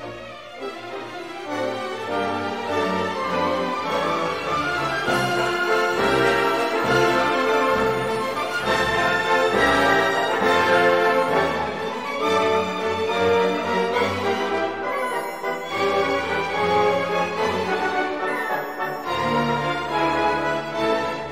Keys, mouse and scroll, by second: 0.6 scroll down 2, 1.5-2.7 scroll up 4, 3.5-4.0 scroll down 2, 5.5 scroll up 1, 9.8-10.4 scroll down 2, 10.6 scroll up 2, 11.4-12.0 scroll down 2, 12.3-12.7 scroll up 2, 15.4 scroll down 2, 16.4 0, 21.1-21.3 scroll up 2.